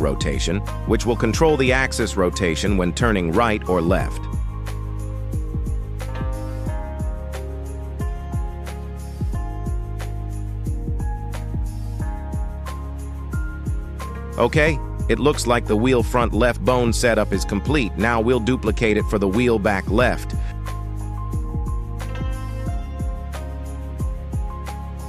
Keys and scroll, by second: 18.2 shift+d, 19.7 y, 23.4 Tab, 24.5 shift+s.